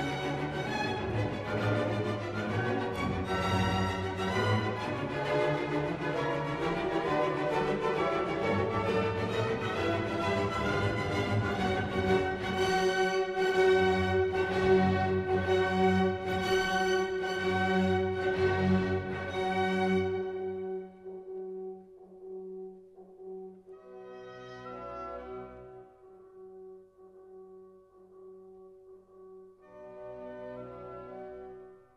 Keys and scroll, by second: 8.0 ctrl+u, 16.2 ctrl+t, 23.1 ctrl+j.